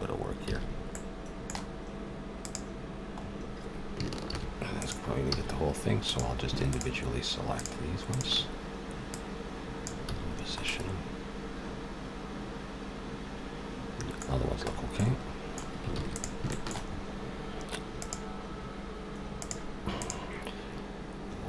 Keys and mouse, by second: 0.5 a, 1.3-2.4 middle drag, 2.4-4.2 drag, 4.2 shift+g, 5.3 a, 6.0-8.0 drag, 9.9 click, 10.1 a, 11.8 middle click, 14.4 middle click, 15.9 ctrl+s, 19.5 click, 20.0-21.4 drag.